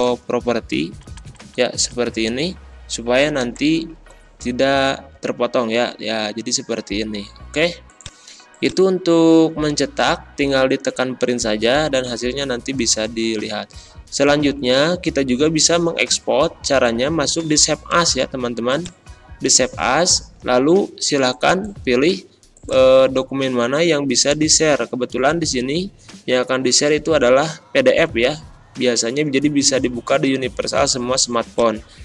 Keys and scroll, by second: 0.9 Up, 3.4 ctrl+p.